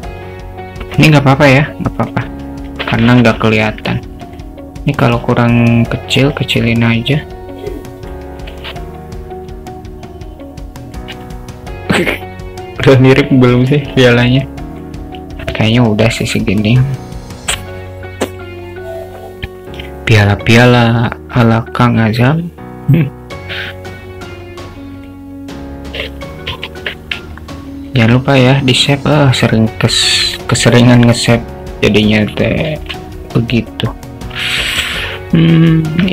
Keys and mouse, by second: 3.0-4.0 alt+middle drag, 4.3 drag, 5.1 s, 7.3-8.3 drag, 8.4 click, 9.8-11.1 alt+middle drag, 11.4-13.2 alt+middle drag, 13.5 click, 13.9-14.4 alt+middle drag, 14.6 alt+middle drag, 16.3 click, 17.4 click, 25.1 click, 25.9 click, 26.7 ctrl+s, 28.2-29.3 alt+shift+middle drag, 30.1 alt+shift+middle click, 32.1 shift+right click, 32.5 shift+a, 34.7 click, 35.9 Tab.